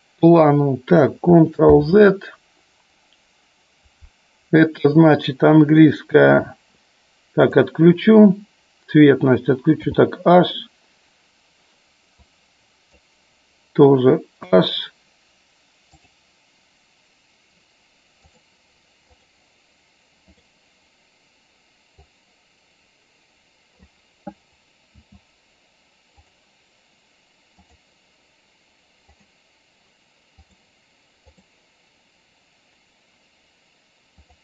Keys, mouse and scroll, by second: 1.9 ctrl+z, 7.5 click, 12.3 click, 15.9-18.7 drag, 22.0-23.8 drag, 26.3 click, 27.7 click, 30.4 click, 34.3-34.4 drag.